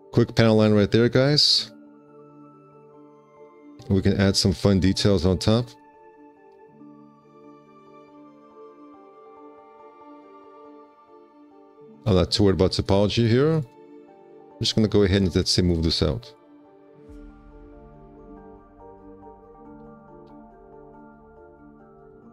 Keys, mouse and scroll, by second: 2.4 z, 3.0 space, 3.5 4, 6.6 z, 9.3 1, 10.4 alt+c, 12.2 4, 13.8 z, 14.5 w, 17.2 r, 19.6 space, 20.1 4, 20.5 q, 21.8 F4.